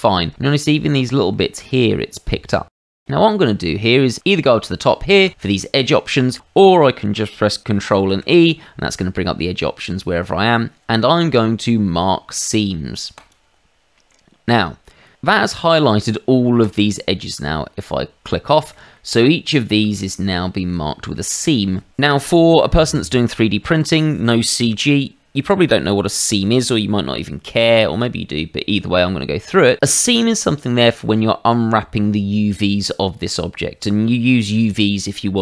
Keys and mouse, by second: 0.3 shift+middle click, 1.1 shift+middle click, 2.7 shift+middle click, 2.8 middle click, 3.0 shift+middle click, 5.2 click, 6.2 Escape, 8.1 ctrl+e, 13.1 click, 14.1 middle click, 16.6 click, 18.4 shift+middle click, 18.9 middle click, 20.3 shift+middle click, 21.1 middle click.